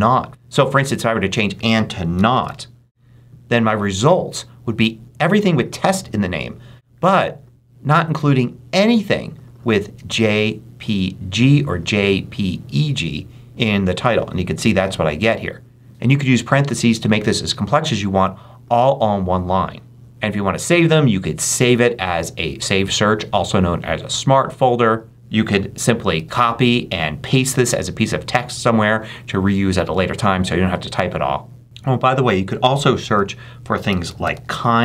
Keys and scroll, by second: 2.7 shift+t, 26.0 super+c.